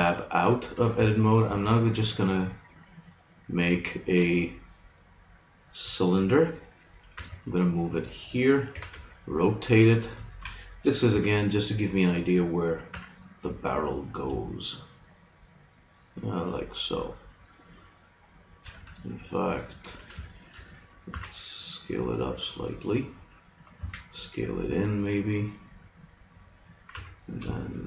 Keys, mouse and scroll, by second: 1.5 shift+a, 7.1 g, 8.7 r, 11.1 s, 12.3-14.0 drag, 12.9 g, 18.5 click, 19.5-20.5 middle drag, 21.1 s, 23.7 s, 26.9 g.